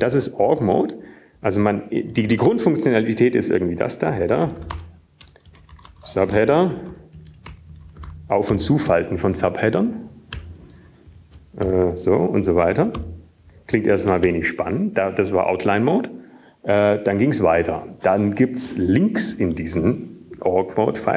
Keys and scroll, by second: 0.6 Up, 1.1 ctrl+Up, 2.8 ctrl+Down, 3.6 Return, 4.1 Down, 4.6-5.1 typing, 6.7-13.2 typing, 14.4-17.2 typing, 18.2 typing.